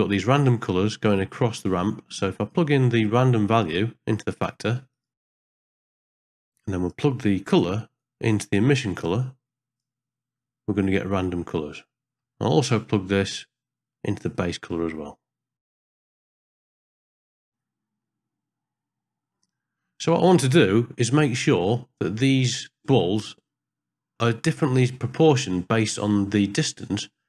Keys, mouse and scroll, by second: 1.3 middle click, 2.1 click, 3.9-4.9 drag, 5.3 drag, 5.8 click, 6.3 click, 6.4 click, 8.0-9.8 drag, 12.0 middle click, 12.9 middle click, 14.0-15.7 drag, 15.9 middle click, 16.4 click, 16.6 middle click, 17.0 click, 17.5 ctrl+space, 18.1-19.3 middle drag, 21.0 middle click, 22.8-24.5 middle drag, 24.9 ctrl+middle click, 25.4 middle click.